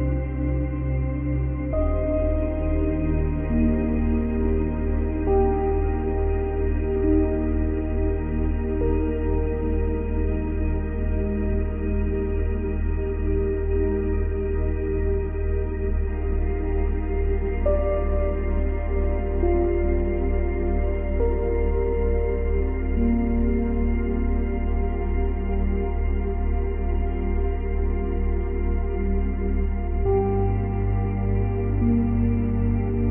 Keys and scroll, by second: 14.3 ctrl+z.